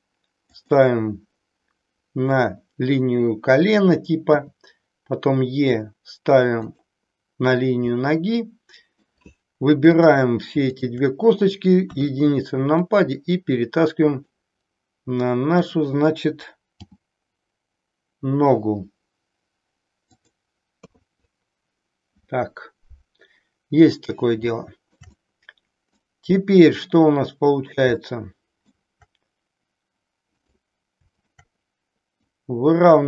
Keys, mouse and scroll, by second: 4.3 e, 6.7 click, 7.9-9.0 middle drag, 9.9 click, 10.8 shift+click, 11.7 KP_1, 12.9-14.3 drag, 15.5 click, 16.8 g, 20.2 click, 20.8 KP_3, 24.5 shift+middle click, 25.2-26.2 middle drag, 26.4-28.6 middle drag, 30.3 click, 31.0 shift+click, 32.1-33.0 drag.